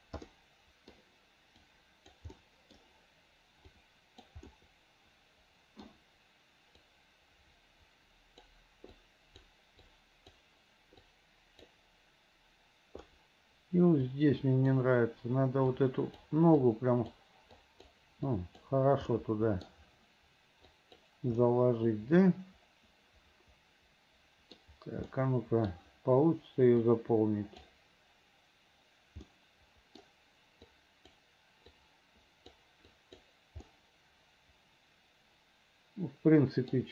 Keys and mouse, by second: 0.4 middle click, 1.8 right click, 2.5 click, 3.8 right click, 4.6-5.9 drag, 6.9-8.6 right drag, 9.1 right click, 10.0 right click, 11.2 right click, 14.2 right click, 15.9 right click, 16.8 right click, 17.7 right click, 18.4 right click, 19.2 middle click, 20.8 right click, 21.5-22.5 middle drag, 22.9 middle click, 23.2-24.6 middle drag, 24.7 middle click, 25.2 middle click, 26.9 right click, 29.4 middle click, 30.8 click, 31.8 click, 33.0 click, 33.8-36.8 middle drag.